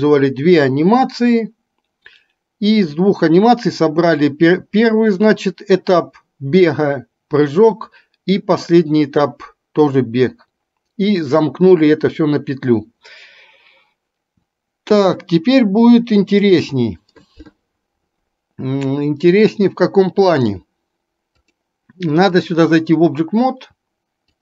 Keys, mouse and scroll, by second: 21.6-22.6 drag.